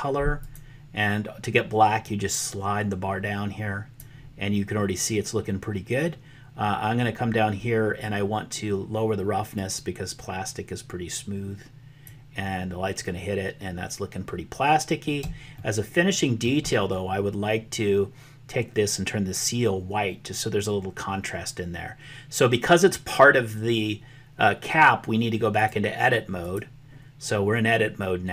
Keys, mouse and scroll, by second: 0.4 click, 9.6-12.1 drag, 15.6 shift+middle click, 25.6 click.